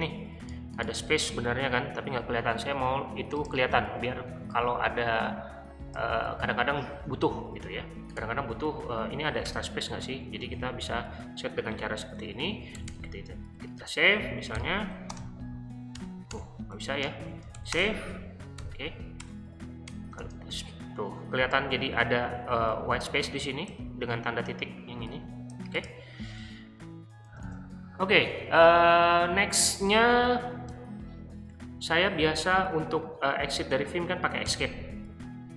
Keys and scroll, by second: 6.4 super+c, 9.4 BackSpace, 10.4 super+v, 12.2 Escape, 12.3-18.6 typing, 19.2 Return, 19.9 typing, 26.4-27.4 typing, 34.4 BackSpace.